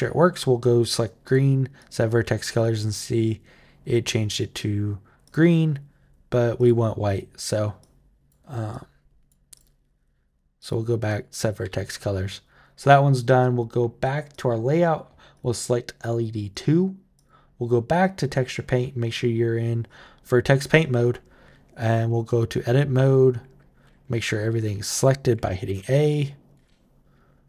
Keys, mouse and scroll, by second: 1.0 click, 1.6 click, 5.0 click, 6.4 click, 7.6 click, 8.5 click, 9.3 click, 10.3 click, 10.9 click, 14.1 click, 15.1 click, 16.3 click, 17.0 click, 18.1 click, 19.6 click, 21.9 Tab, 25.1 a, 25.5 a, 25.9 click, 26.3 a, 27.3 Tab.